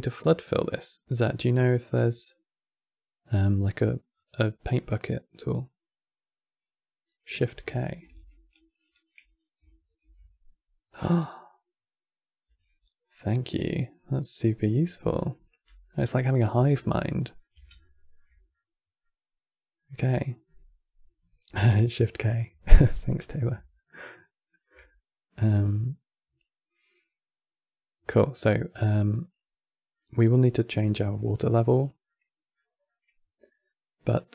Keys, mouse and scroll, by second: 4.2-6.9 drag, 9.7 shift+k, 15.7-22.6 middle drag, 23.5-26.6 shift+middle drag, 28.2-31.2 middle drag, 31.5 scroll down 2, 31.8-34.3 middle drag.